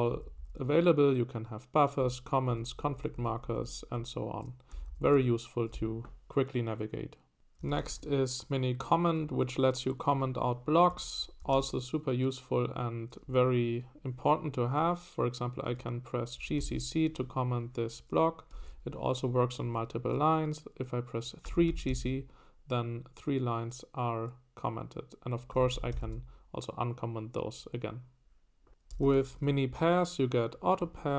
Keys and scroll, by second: 0.0-0.4 typing, 1.8-5.3 typing, 7.4-8.4 typing, 10.9 Escape, 11.2-12.0 typing, 16.1-17.2 typing, 18.4-19.1 typing, 21.2-22.5 typing, 25.5-26.5 typing, 28.7-29.7 typing, 30.8 Escape.